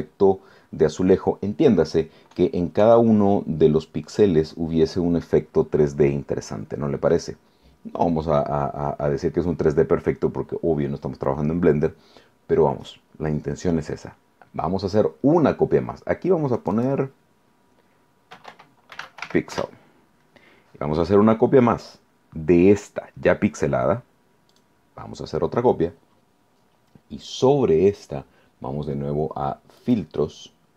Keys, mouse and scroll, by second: 16.6 click, 18.1-19.7 typing, 24.5 click, 29.8 click.